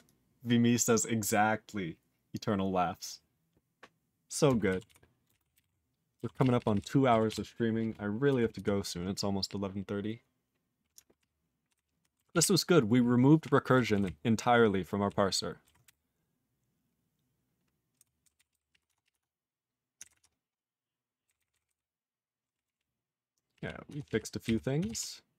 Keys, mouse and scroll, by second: 4.8 ctrl+s, 5.2 ctrl+space, 5.3 ctrl+p, 5.5 ctrl+g, 5.6 ctrl+n, 6.3 ctrl+s, 6.4 ctrl+p, 6.5 ctrl+p, 6.7 ctrl+p, 7.3 ctrl+s, 8.5 ctrl+s, 11.2 ctrl+p, 11.7 ctrl+n, 12.3 ctrl+s, 12.4-13.4 ctrl+p, 13.9 ctrl+s, 14.0-15.0 ctrl+n.